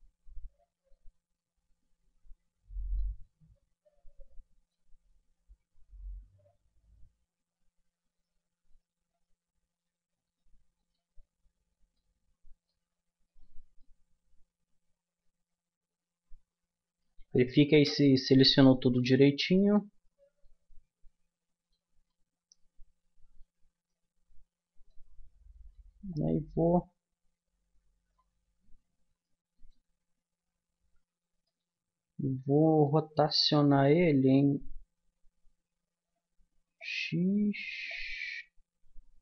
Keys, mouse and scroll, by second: 0.7-3.8 middle drag, 6.6 z, 11.9-14.3 middle drag, 14.3 click, 14.5 middle click, 14.5 click, 14.8 middle click, 19.4-22.4 middle drag, 22.5-24.6 middle drag, 26.1-27.9 drag, 28.6-29.7 middle drag, 30.7 ctrl+z, 33.5 r, 37.9-39.2 drag.